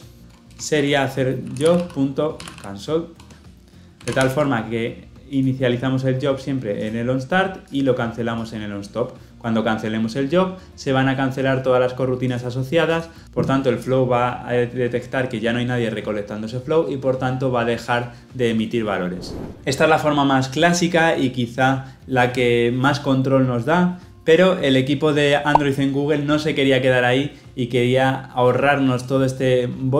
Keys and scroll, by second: 3.1 Return, 4.0 ctrl+alt+l, 4.1 ctrl+alt+o.